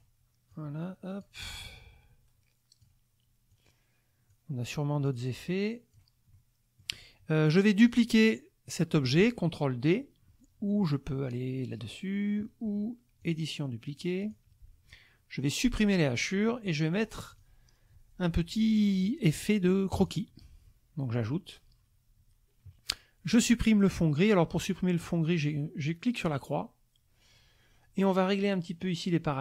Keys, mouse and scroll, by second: 0.5 click, 1.8 click, 2.3-3.0 scroll down 1, 3.5 click, 5.1 click, 6.3 middle click, 6.4 click, 7.9 click, 13.2 click, 14.2 click, 16.1 click, 17.3 click, 19.9 click, 21.2 click, 26.3 click.